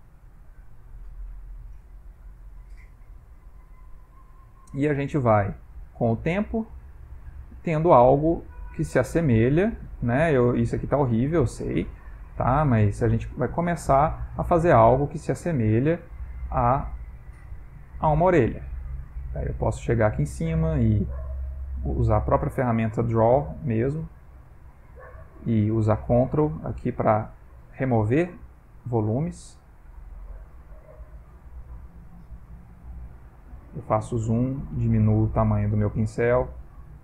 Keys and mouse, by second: 0.1 click, 1.0 ctrl+middle click, 1.5 middle click, 5.2 middle click, 5.8 middle click, 6.7 click, 8.3 click, 9.3 click, 10.1 click, 11.1 ctrl+middle click, 11.6 shift+middle click, 12.4 click, 13.5 click, 14.5 click, 15.0 click, 15.5 click, 16.3 click, 16.7 click, 17.3 click, 18.3 click, 18.8 middle click, 22.1 middle click, 24.8 click, 25.7 middle click, 26.3 ctrl+click, 26.8 click, 27.3 middle click, 28.1 ctrl+click, 28.5 ctrl+click, 29.1 ctrl+click, 29.6 ctrl+click, 29.9 ctrl+click, 30.6 middle click, 31.6 middle click, 32.7 ctrl+middle click, 33.0 ctrl+middle click, 33.0 middle click, 33.5 ctrl+middle click, 34.3 shift+middle click, 35.6 f.